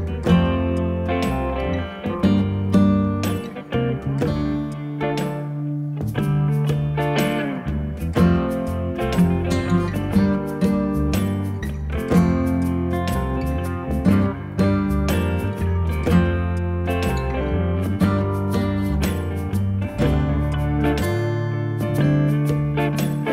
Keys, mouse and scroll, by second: 0.6 alt+click, 3.1 alt+click, 4.8 click, 7.4 click, 9.2 click, 12.9 click.